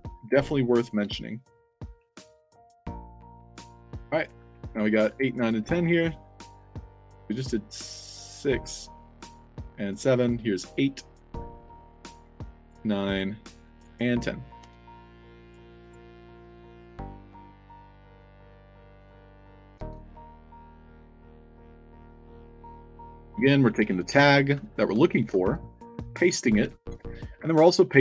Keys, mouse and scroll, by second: 0.1 drag, 0.7 click, 2.0 click, 2.9 click, 3.4-4.7 typing, 9.0 click, 10.1 click, 10.5-11.2 drag, 11.8-12.6 drag, 13.1 click, 15.3 click, 15.7 click, 16.5 click, 17.5 click, 18.1 click, 18.9 click, 20.5 i, 20.9 click, 22.0 click, 23.0 click, 24.5 click, 25.1 ctrl+c, 25.4 click, 26.3 click, 26.5 ctrl+v.